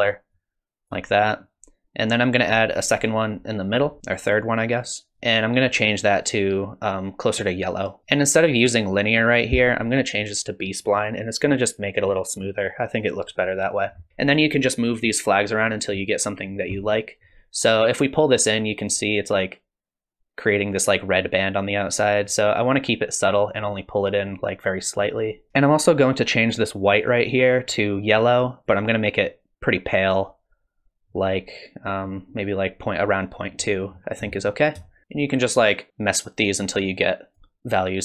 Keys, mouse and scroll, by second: 2.7 click, 9.2 click, 17.5 click, 22.2 click, 26.8 click, 33.9-34.5 scroll up 1, 34.5 scroll down 1, 34.7 scroll down 1, 34.8 shift+middle click, 35.0 middle click, 35.0 click, 35.9 click, 37.8 click.